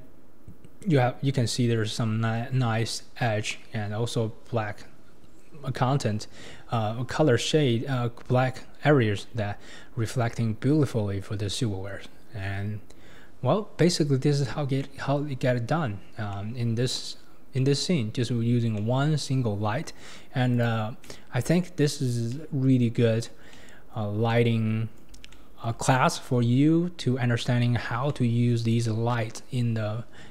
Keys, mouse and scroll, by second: 8.2 scroll up 1, 8.9-9.2 scroll up 1, 9.2 scroll down 3, 13.0-13.9 scroll down 1, 13.9-14.8 scroll down 1, 14.8-15.4 middle drag, 15.4-16.3 scroll down 7, 16.3-17.5 middle drag, 17.5 scroll up 1, 17.6-18.3 middle drag, 18.3-18.8 scroll down 2, 18.8-20.6 middle drag, 20.6 click, 21.0-21.8 middle drag, 21.8-22.3 scroll down 3, 22.3-29.9 middle drag, 29.9-30.3 scroll up 4.